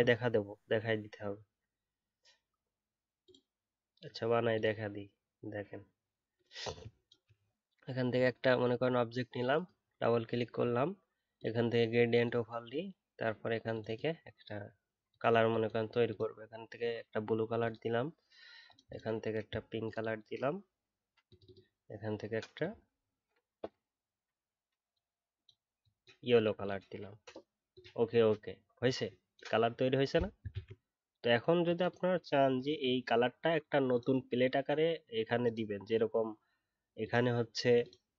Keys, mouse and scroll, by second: 30.5 ctrl+z.